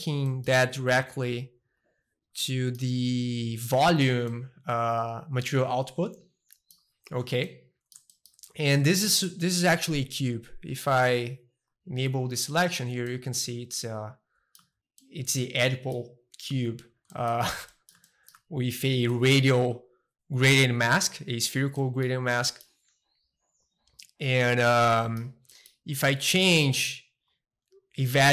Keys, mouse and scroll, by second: 1.8 click, 2.4-6.3 middle drag, 7.0 middle click, 8.1-10.9 shift+middle drag, 10.9-12.4 drag, 12.4-14.5 middle drag, 14.6 Tab, 15.0-16.5 middle drag, 16.5 Tab, 16.7-17.4 scroll down 2, 17.4 middle click, 18.0-19.6 shift+middle drag, 18.4 a, 19.6-20.6 scroll down 2, 20.6-21.8 drag, 21.8 middle click, 22.2 scroll down 2, 22.4-23.6 middle drag, 23.6-24.9 drag, 24.9-28.3 middle drag.